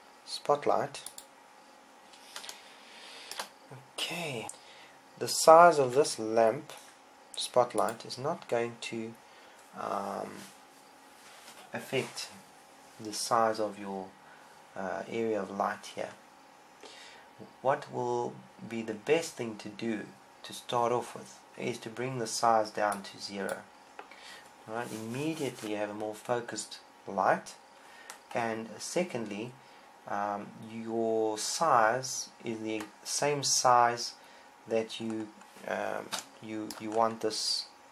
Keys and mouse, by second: 3.3-5.0 middle drag, 6.7 s, 8.8-10.5 drag, 24.6 click, 35.8-37.9 middle drag.